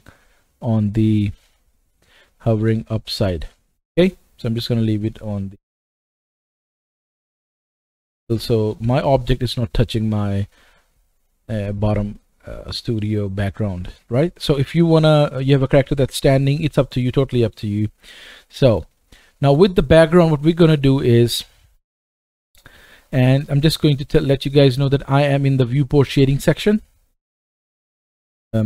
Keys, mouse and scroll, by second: 0.6-1.5 scroll down 2, 1.5-1.9 scroll up 3, 2.3-7.2 shift+right drag, 3.1-3.4 scroll down 2, 3.9-4.7 scroll up 2, 4.7-5.1 scroll down 1, 5.1 middle click, 5.8-6.2 scroll down 1, 6.2 middle click, 7.2-17.9 middle drag, 17.8-18.4 scroll down 2, 18.6-19.2 middle drag, 19.4 shift+middle click, 19.5 middle click, 21.3-21.9 middle drag.